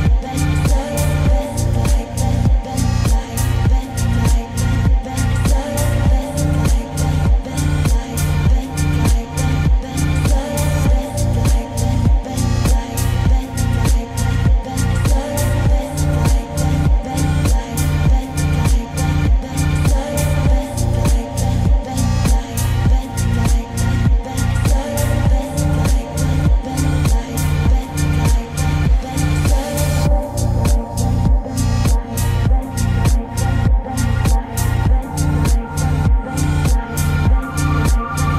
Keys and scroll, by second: 2.0 ctrl+z, 15.2 ctrl+space, 24.9 ctrl+space.